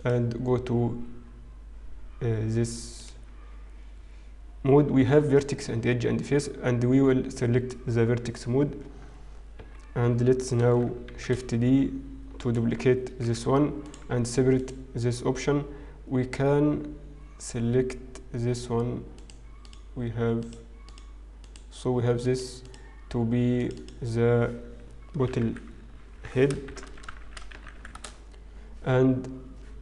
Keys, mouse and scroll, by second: 0.0 click, 0.7-1.3 scroll up 2, 2.9 alt+click, 9.5 KP_1, 9.9-11.0 scroll down 3, 11.7 shift+d, 13.3 p, 14.1 Tab, 14.5 click, 19.2 click, 19.6 click, 20.4 click, 20.9 click, 21.4 click, 22.6 click, 23.5 click, 27.1 t.